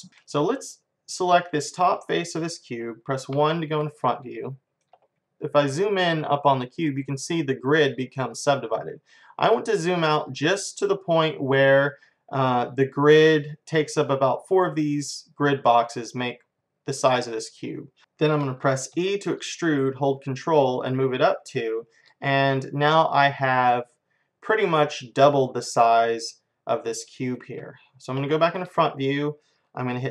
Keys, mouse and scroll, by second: 0.7-2.6 drag, 2.6-5.8 middle drag, 3.4 KP_1, 8.9-14.8 middle drag, 18.0 ctrl+z, 19.0 e, 24.5-27.3 middle drag, 28.2 KP_1.